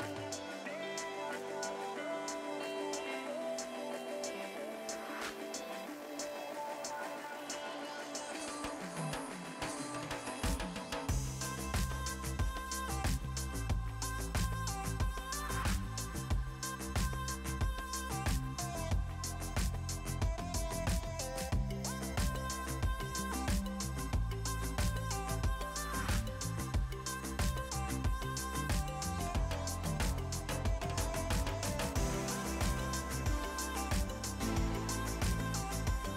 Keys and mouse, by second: 0.0-0.7 typing, 0.8 click, 2.4 click, 6.3 click, 6.7 right click, 7.0 click, 7.5 y, 7.8 click, 8.7 a, 8.8 click, 12.8 c, 13.1 space, 13.3 click, 13.6 Escape, 14.4 KP_6, 14.5 Return, 14.8 click, 15.4 click, 15.8 a, 15.9 click, 16.8 click, 18.5 click, 20.2 a, 20.3 click, 21.2 Escape, 21.3 click.